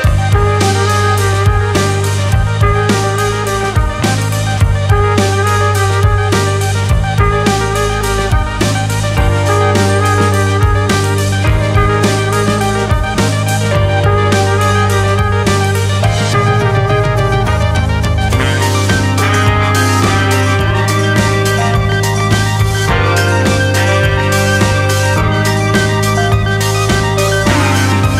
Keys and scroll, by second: 0.8 ctrl+space, 4.5 ctrl+space.